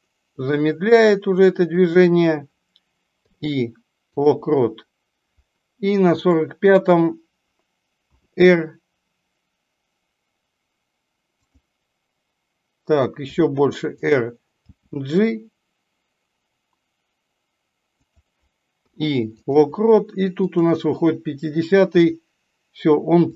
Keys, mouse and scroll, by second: 6.2 click, 20.6 click.